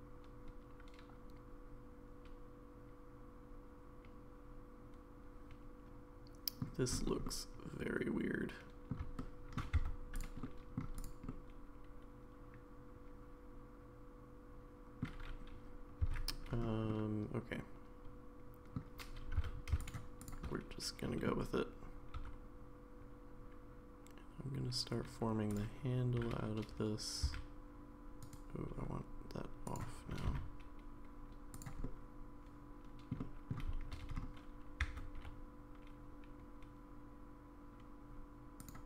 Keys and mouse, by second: 7.2-8.9 middle drag, 9.2 shift+middle click, 9.8 Tab, 10.2 click, 10.4-10.8 middle drag, 11.0 click, 11.3-15.0 middle drag, 16.0 Tab, 16.9-18.8 middle drag, 19.4 3, 20.5 middle click, 22.1 e, 26.2 g, 29.7 click, 30.1 g, 31.8-33.1 middle drag, 33.2 middle click, 34.8 s.